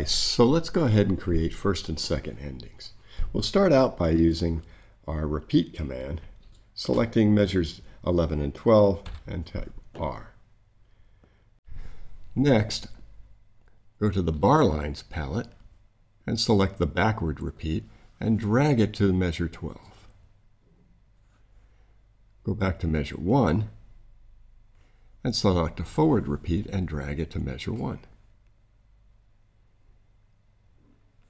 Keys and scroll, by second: 9.0 r.